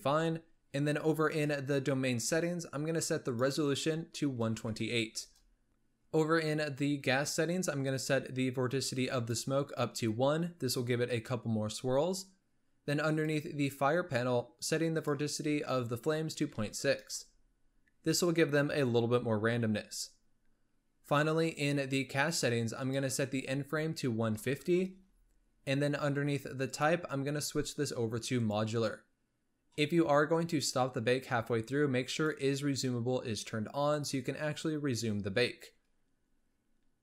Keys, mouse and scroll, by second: 1.2 click, 3.1-5.7 drag, 5.7-7.9 scroll down 9, 9.0-12.0 drag, 12.9-13.8 drag, 13.8-14.8 scroll down 3, 14.8-18.1 drag, 20.1-20.7 scroll down 3, 22.7-25.9 drag, 26.6-29.6 drag, 32.0 click.